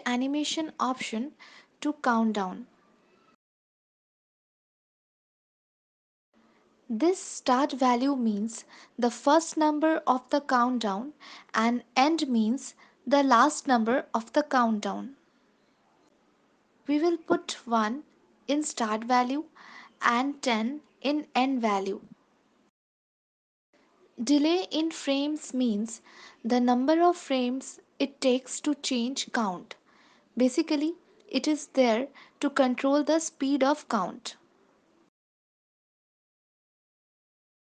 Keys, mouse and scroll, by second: 1.8 click, 4.0 ctrl+s, 5.2 click, 9.3 click, 14.0 click, 15.9 ctrl+s, 17.9 ctrl+s, 18.8 space, 21.3 space, 22.1 click, 25.9 click, 26.1 click, 26.3 click, 26.4 click, 27.1 click, 30.9 click, 32.3 ctrl+s, 33.9 space, 35.1 space, 36.3-36.6 click, 36.4 click, 36.8 click, 37.1 click, 37.4 click.